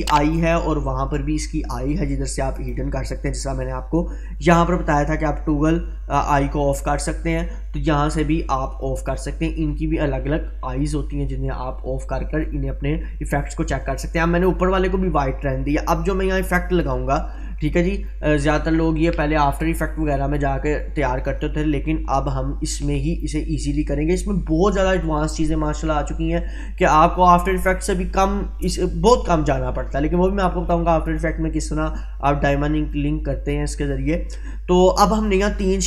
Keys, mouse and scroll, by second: 0.4 click, 16.8-18.4 drag, 22.3-23.5 drag, 33.0-34.2 drag.